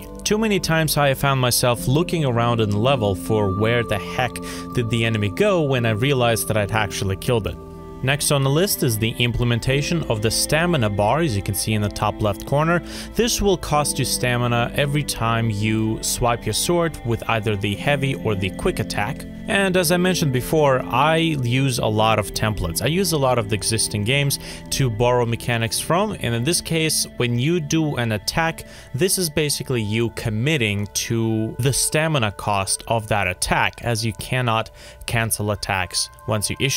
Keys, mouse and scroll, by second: 35.8 F5, 36.1 alt+F4.